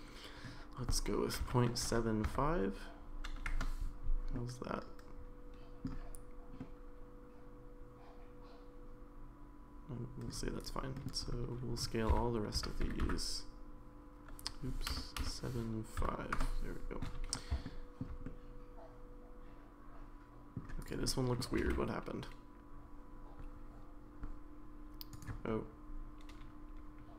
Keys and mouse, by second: 4.3-5.9 middle drag, 6.6-10.3 middle drag, 10.9 middle click, 12.1 s, 17.6 shift+middle click, 18.2-20.6 middle drag, 20.8 click, 21.1 middle click, 21.6 g, 25.5-27.1 middle drag.